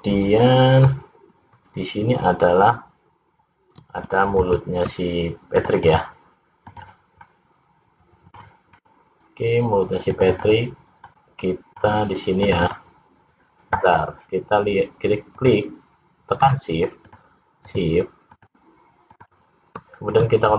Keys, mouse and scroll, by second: 4.5 ctrl+r, 6.7 click, 7.3 middle click, 8.8-9.3 scroll up 1, 10.1 click, 10.5 click, 11.1 middle click, 12.5 click, 12.9 click, 15.4 click, 17.1 shift+click, 17.3 shift+click, 18.4 shift+click.